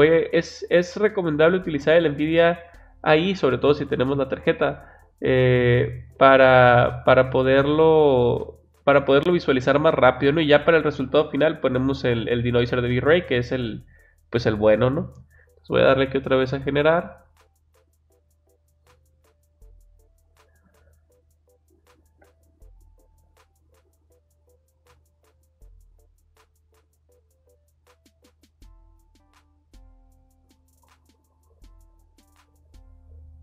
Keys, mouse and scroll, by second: 5.1 click, 5.5 click, 16.3 click.